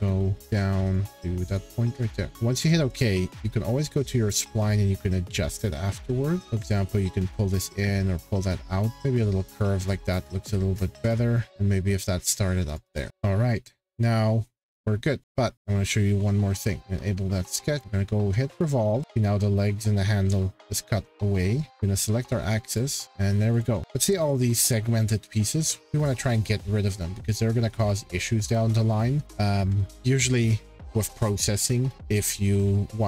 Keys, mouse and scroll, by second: 0.4 click, 0.9 click, 1.1 click, 1.5 right click, 2.3 click, 2.9 click, 3.6-4.0 scroll, 5.9-7.0 scroll, 9.8 click, 10.4-11.5 scroll, 12.3 click, 12.7 click, 12.9-13.8 scroll, 14.9 middle click, 15.5 click, 15.5 scroll, 16.8 click, 17.7 click, 18.6 click, 22.7 click, 23.6 click, 23.8 scroll, 29.4-30.2 scroll.